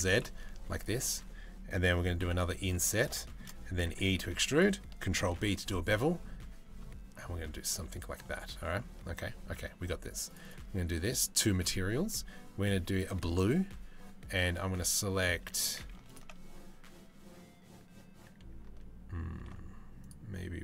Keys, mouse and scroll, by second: 0.3 3, 1.9 i, 2.9 shift+middle click, 3.5 e, 4.9 ctrl+b, 7.9 Tab, 8.1 Tab, 9.9 click, 11.0-12.6 drag, 15.0 3, 19.0 ctrl+r.